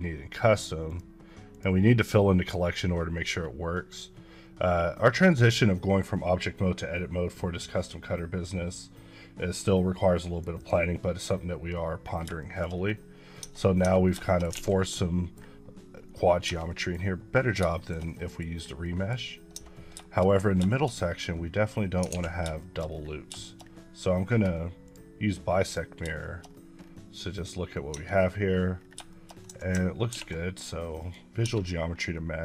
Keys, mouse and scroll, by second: 3.3-5.1 scroll up 1, 5.1 click, 10.6 double click, 11.5 scroll up 1, 12.1 scroll up 2, 12.4 shift+middle click, 12.7-13.2 scroll down 2, 13.4 Tab, 14.3 shift+middle click, 15.0 middle click, 16.4 Tab, 16.7 middle click, 17.4 scroll down 1, 17.7 shift+middle click, 18.5 scroll up 1, 18.8 middle click, 19.5 Tab, 20.4-21.0 scroll up 5, 20.7 shift+middle click, 22.1 alt+x, 22.6 shift+middle click, 22.9 scroll down 3, 23.4 shift+middle click, 24.9 click, 26.2 shift+middle click, 26.4-26.9 shift+scroll up 5, 27.8 scroll up 1, 27.9 Tab, 28.1 scroll down 3, 28.8 scroll down 1, 29.1 shift+middle click, 30.1 ctrl+a, 31.0 click, 31.4 Tab, 31.7-32.2 scroll up 5.